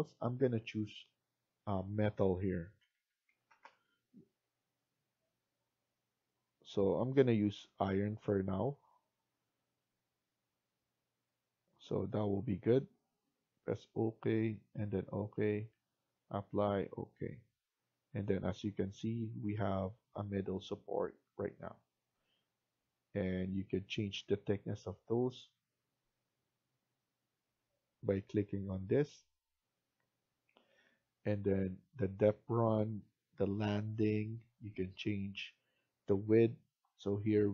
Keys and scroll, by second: 2.5-4.0 typing.